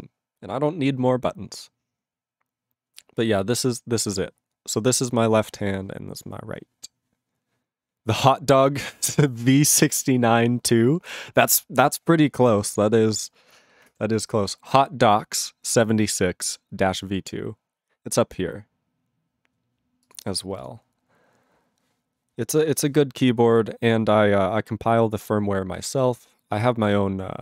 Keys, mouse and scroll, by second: 12.6 ctrl+s.